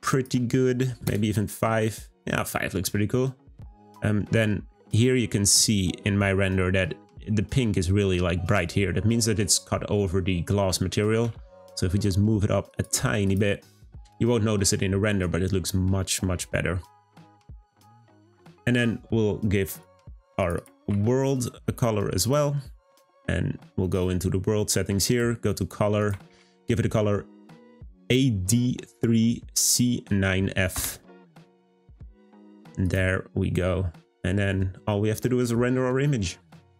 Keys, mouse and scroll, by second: 0.0-3.1 drag, 13.2 click, 17.0 scroll up 1, 22.2 click, 25.0 click, 32.8 click, 33.6 scroll up 1.